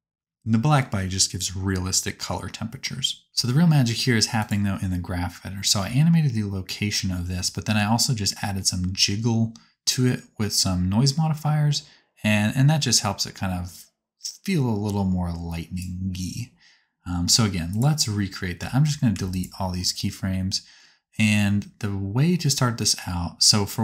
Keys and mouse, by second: 8.6 right click, 9.0-12.2 drag, 15.1-17.8 right drag, 18.5 a, 19.0 x, 21.1-22.7 drag.